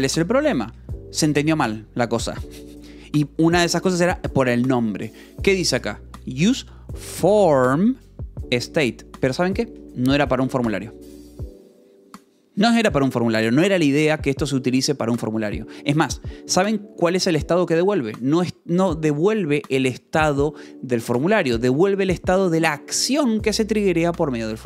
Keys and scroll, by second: 1.2 Escape, 2.9-3.8 typing, 10.2 Escape, 16.4-17.2 typing, 21.5 Escape, 21.6 j.